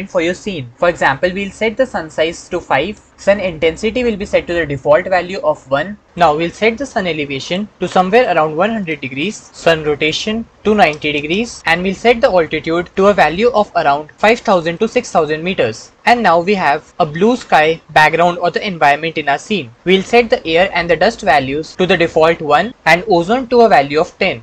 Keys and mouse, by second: 2.0-3.1 middle drag, 7.2 click, 7.7 KP_1, 9.0 KP_0, 15.1 KP_0, 17.8-19.3 middle drag.